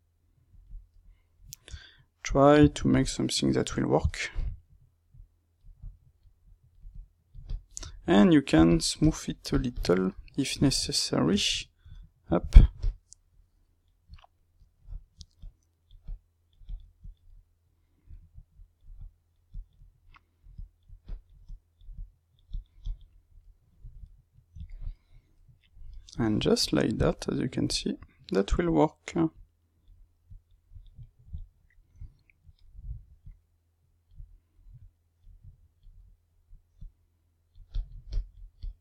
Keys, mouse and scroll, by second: 0.9-5.1 middle drag, 1.7 Tab, 5.1-7.8 drag, 7.8 ctrl+middle click, 8.6 shift+click, 9.2 middle click, 9.5 shift+click, 10.0-12.7 middle drag, 12.7-14.1 shift+drag, 14.1-15.3 middle drag, 15.3-17.2 drag, 17.2-18.5 middle drag, 18.5-20.0 drag, 20.0 middle click, 20.5-23.3 drag, 23.3-28.6 middle drag, 28.6-30.9 drag, 30.9-33.2 middle drag, 33.2-34.2 drag, 34.2 middle click, 34.7-35.9 drag, 35.9 middle click, 36.7-38.8 drag.